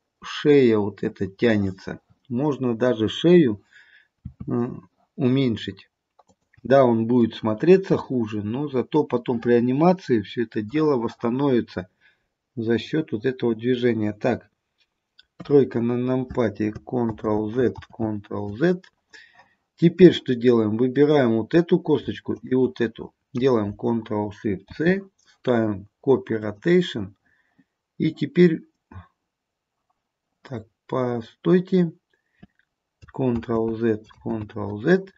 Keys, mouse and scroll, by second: 4.3 r, 7.3 middle click, 15.4 KP_3, 17.2 ctrl+z, 17.9 ctrl+z, 21.2 click, 22.5 shift+click, 24.8 ctrl+shift+c, 30.7-31.9 scroll up 2, 33.5 ctrl+z, 33.5-34.0 scroll up 1, 34.3 ctrl+z.